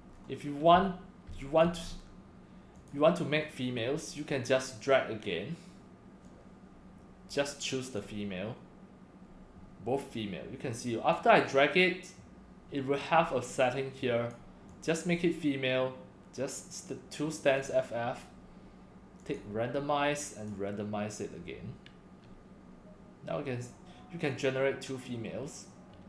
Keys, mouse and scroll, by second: 0.2 scroll down 2, 0.3 scroll up 1, 0.7 click, 0.8 x, 1.3 c, 1.8 scroll down 1, 2.8 click, 6.3-8.0 drag, 14.0-14.3 drag, 14.7 click, 17.6 click, 19.2 click, 20.4 click.